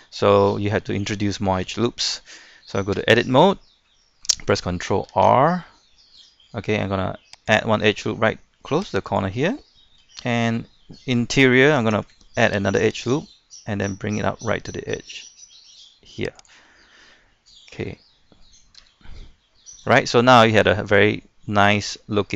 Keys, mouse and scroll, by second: 0.7-1.0 scroll down 1, 1.0 middle click, 2.9 Tab, 3.3-3.6 scroll up 1, 3.8 shift+middle click, 5.1 ctrl+r, 7.5 click, 9.4 middle click, 10.2 shift+middle click, 12.3 ctrl+r, 12.9-14.0 drag, 16.7-17.0 scroll down 1, 17.0-18.0 middle drag, 18.8 Tab, 19.1 scroll down 1, 19.3 middle click, 20.0-20.7 scroll up 2, 20.7-22.3 middle drag.